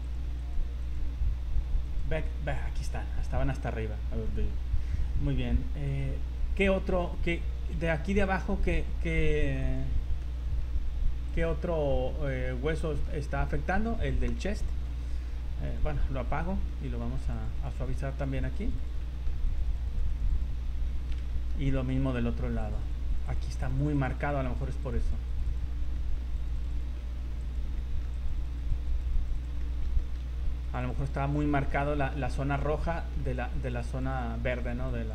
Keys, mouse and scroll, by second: 0.0 click, 0.4 click, 0.8 click, 1.8 click, 2.6-3.1 scroll up 3, 4.2 middle click, 5.8 click, 8.2 shift+right click, 8.6 right click, 9.6 click, 10.2 middle click, 11.3 click, 13.1 scroll up 2, 13.9 scroll down 1, 14.6 shift+middle click, 15.7 click, 16.7 middle click, 17.3 click, 17.6 click, 18.0 click, 18.1 click, 18.4 click, 18.6 click, 18.8 click, 19.0 middle click, 19.5 click, 19.7 click, 19.9 click, 20.1 click, 20.3 click, 20.5 scroll down 3, 20.8 middle click, 21.3 shift+middle click, 21.7 middle click, 22.0-22.3 scroll up 5, 22.6 click, 22.8 click, 23.1 click, 23.3 click, 23.4 click, 23.7 click, 23.9 click, 23.9 click, 24.2 click, 24.5-25.0 click, 24.7 click, 24.8 click, 25.3 click, 25.5 click, 25.7 scroll down 3, 26.0 middle click, 26.4 click, 26.5 click, 26.7 click, 27.0 middle click, 27.4 click, 27.8 middle click, 28.1 click, 28.4 click, 28.6 click, 28.9 click, 29.2 click, 29.4 click, 29.6 middle click, 30.0 shift+middle click, 30.3 scroll up 2, 30.7 click, 30.8 click, 31.0 click, 31.4 click, 31.7 middle click, 32.3 shift+middle click, 32.9 middle click, 33.3 click, 33.8 click, 34.2 click, 34.5 click, 34.9 click.